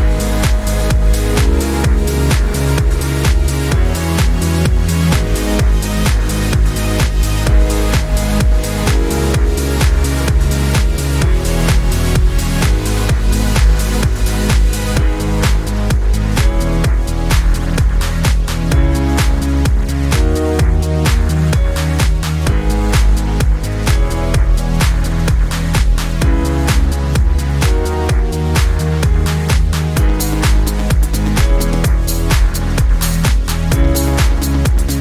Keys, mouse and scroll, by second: 0.0 click, 0.3 drag, 0.5 click, 1.0-1.9 drag, 2.2 click, 2.5 click, 2.8 drag, 3.3-3.8 drag, 4.0 click, 4.2 click, 4.6 click, 5.3 click, 5.6 click, 6.1 click, 6.6 click, 6.8 click, 6.9 click, 7.1 click, 7.3 click, 7.6 click, 8.4 -, 8.5 click, 9.0 click, 9.1 click, 9.6 click, 9.7 click, 10.1 click, 10.8 click, 11.8 click, 12.5 click, 12.8 click, 13.1 click, 13.4 click, 13.8 shift+click, 14.7 click, 15.0 ctrl+d, 15.3 click, 15.4 shift+click, 15.5 click, 15.9 click, 16.0 click, 16.2 shift+click, 16.4 drag, 16.6 click, 16.8 click, 17.1 click, 17.7 click, 18.0 click, 18.3 click, 18.5 click, 18.7 click, 19.1 click, 19.6 click, 20.2 click, 20.4 click, 21.0 click, 21.5 click, 21.8 click, 22.1 click, 22.6 -, 22.7 middle click, 23.2 click, 23.9 click, 24.4 drag, 24.6 click, 24.9 click, 25.2 click, 25.6 click, 25.8 click, 26.1 click, 26.2 click, 26.6 click, 26.9 click, 27.4 click, 27.7 -, 27.8 click, 27.9 click, 28.5 click, 28.7 click, 29.0 click, 30.1 click, 30.3 click, 31.1 click, 31.6 -, 31.7 click, 32.1 click, 32.3 click, 32.9 click, 33.2 right click, 33.4 click, 33.6 click, 33.9-34.4 drag, 34.5 click, 34.9 click.